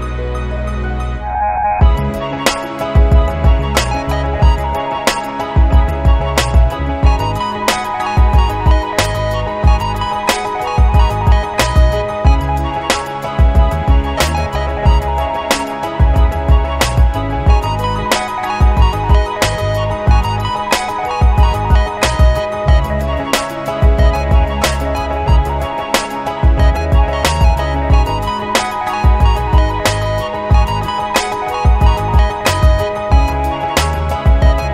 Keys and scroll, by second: 0.0 b, 9.0 [, 9.1 [, 9.2 [, 9.5 [, 26.3 Delete.